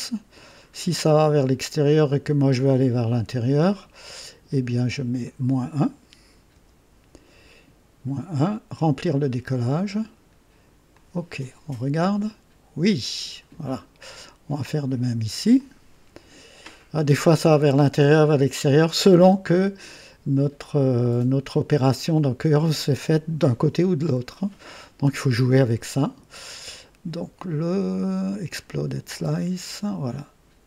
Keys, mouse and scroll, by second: 0.7 scroll down 2, 1.5-2.9 right drag, 3.6-4.4 drag, 5.2 click, 6.4 KP_Subtract, 9.4 click, 10.8 click, 11.7-13.2 drag, 13.2 typing, 15.5 click, 28.2 click, 29.2-30.3 right drag.